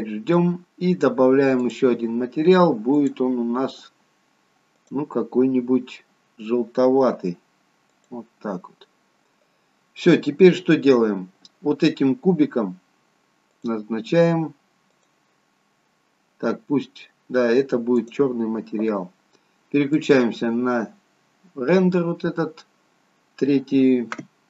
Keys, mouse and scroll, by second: 1.6 click, 13.6 click, 22.7 click.